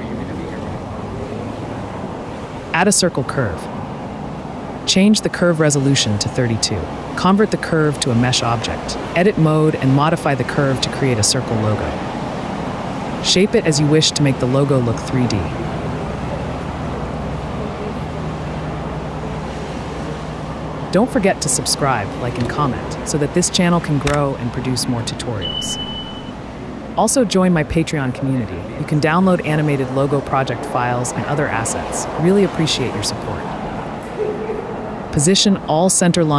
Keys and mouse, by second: 0.8 KP_Decimal, 1.1 Tab, 2.7 click, 3.4 click, 6.1-7.1 drag, 8.9 Tab, 8.9 a, 9.0 s, 10.6 e, 10.6 s, 12.5 s, 14.1 Tab, 14.8 z, 16.3 click, 16.8 Delete, 17.2 click, 17.7 click, 18.5 /, 19.1 Tab, 19.8 click, 20.4 alt+shift+click, 21.2 g, 21.4 z, 22.8 /, 23.5 click, 24.3 z, 25.2 ctrl+b, 28.5 s, 29.8 shift+click, 30.5 alt+shift+click, 31.4 s, 32.9 a, 33.3 s, 33.3 z, 33.3 0, 34.4 g, 34.6 z, 35.4 click.